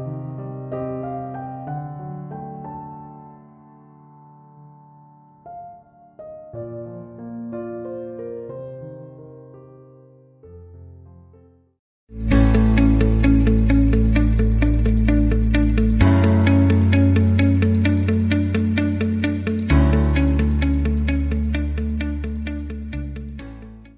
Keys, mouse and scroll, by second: 6.2 ctrl+7.